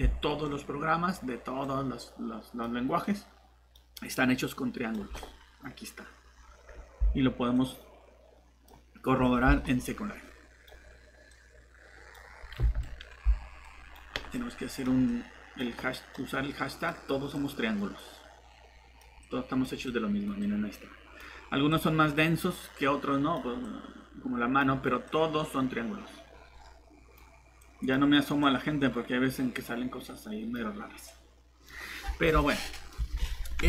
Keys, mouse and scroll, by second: 5.8 typing, 6.3 scroll down 1, 7.1-7.7 typing, 7.5 click, 10.6 typing, 12.7 Escape, 18.4 click, 21.2 Escape, 21.2 typing, 27.0 Escape, 27.0 typing.